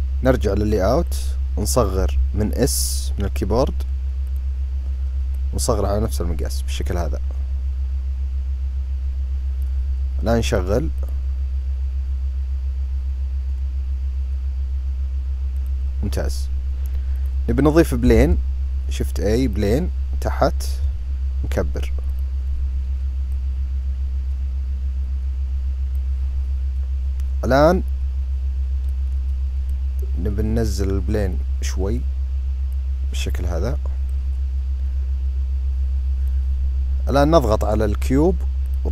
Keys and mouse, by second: 0.7 click, 1.6 s, 5.1-9.3 drag, 15.3 click, 16.8 click, 18.0 shift+a, 20.5 s, 23.0 click, 24.4-25.7 drag, 28.6-29.3 drag, 32.4-33.7 drag, 33.8-36.0 drag, 36.8 click.